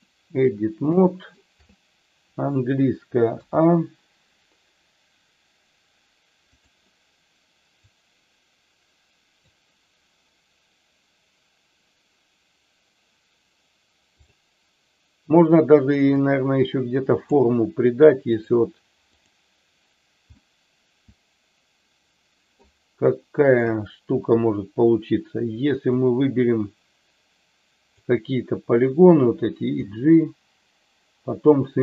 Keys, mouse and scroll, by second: 0.9 shift+middle click, 3.3 a, 6.5 click, 7.8-9.4 drag, 14.1 click, 16.1-17.3 drag, 19.1 click, 20.4-22.5 middle drag, 23.5 KP_1, 25.9-28.0 drag, 29.7 g.